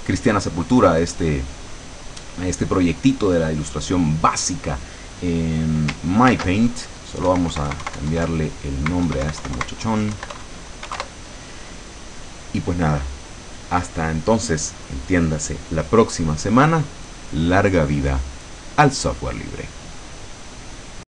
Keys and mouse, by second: 6.4 ctrl+shift+s, 7.4 Right, 10.4 Delete, 10.9 KP_4.